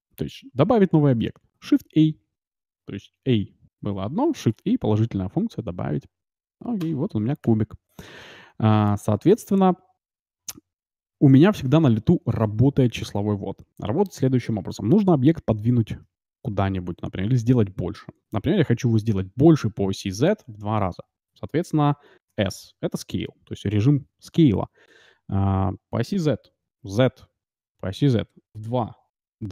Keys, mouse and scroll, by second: 1.1 shift+a, 4.9 shift+a, 7.4 KP_Decimal, 8.0-12.4 middle drag, 22.2 s.